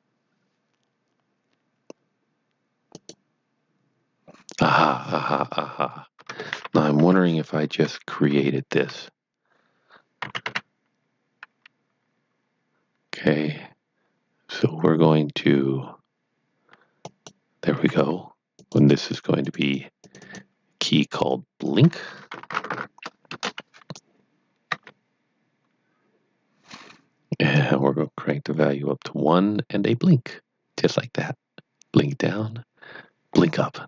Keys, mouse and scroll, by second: 2.9 click, 6.1 click, 6.2 Tab, 6.9 KP_1, 8.0-8.8 scroll up 1, 8.8 a, 10.0-10.9 typing, 16.7-17.5 typing, 17.1 click, 18.5 click, 18.7 double click, 19.4 click, 19.6 double click, 19.9 click, 20.1 double click, 21.3 click, 22.3-23.1 typing, 23.3 Return, 24.7 Tab, 27.5 click.